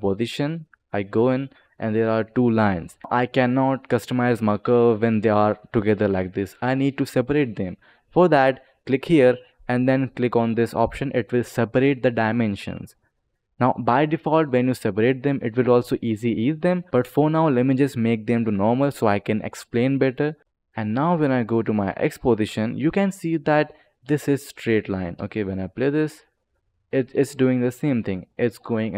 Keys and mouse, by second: 0.4 click, 0.8 click, 8.6 click, 11.2 click, 12.4 click, 13.0 click, 13.4 click, 14.3 click, 15.8 click, 16.9 ctrl+z, 16.9 click, 18.2 ctrl+click, 18.4 click, 18.9 click, 19.8 click, 20.4 click, 21.0 click, 21.7 click, 24.9 space.